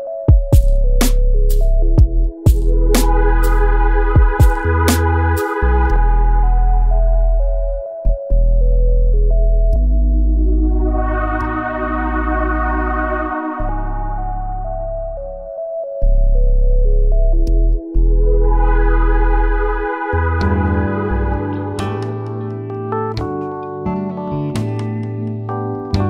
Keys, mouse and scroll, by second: 5.2-5.7 scroll down 1, 6.0 scroll down 1, 6.2-7.5 middle drag, 7.5-8.8 scroll up 2, 8.8 Tab, 9.2 Tab, 9.5 click, 10.3 click, 12.0 Tab, 12.4 scroll down 1, 12.7 alt+a, 13.0-15.9 middle drag, 15.9 scroll up 2, 16.2 middle click, 17.0 click, 17.2 Tab, 18.0 Tab, 18.4 click, 18.5 Tab, 23.5 KP_Divide, 23.7-24.0 scroll down 2, 24.0-24.7 scroll up 2, 24.7 KP_Divide, 25.5 scroll down 2, 25.6 middle click.